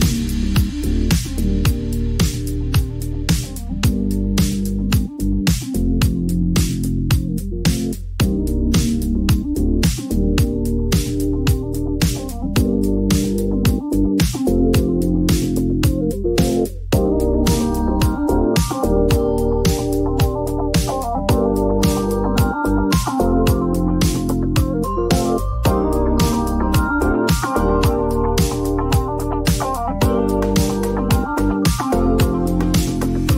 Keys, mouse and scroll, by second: 0.4 click, 0.4 click, 2.4 click, 3.3 click, 4.1-4.4 typing, 5.5 Return, 6.8 click, 8.3 click, 9.2 click, 9.4-10.2 typing, 10.2 Return, 11.3 click, 11.4-12.1 typing, 13.7 click, 15.3 click, 16.2 click, 17.5 click, 19.0 click, 20.3 click, 23.4 click, 24.2 1, 24.8 Return, 26.1 click, 27.0 click, 27.3 ctrl+z, 28.5 click, 28.7 3, 29.0 Return, 29.8 click, 30.0-30.9 typing, 32.2-32.7 scroll down 2, 32.2 middle click, 32.7-33.3 scroll.